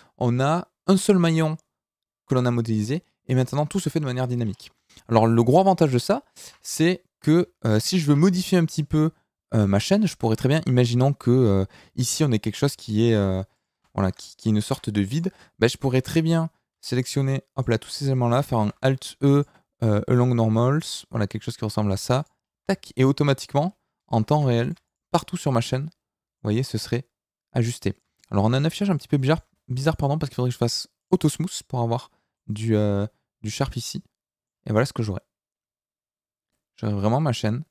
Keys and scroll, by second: 6.4 KP_Decimal, 7.3 Tab, 7.8 a, 8.0 KP_Decimal, 13.0 ctrl+r, 13.7 Escape, 14.6 ctrl+r, 15.3 Escape, 18.5 alt+e, 22.6 Tab.